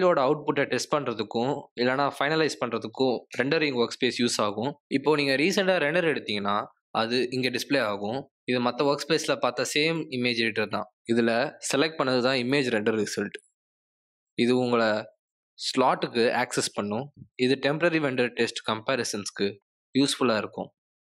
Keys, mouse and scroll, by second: 1.0 space.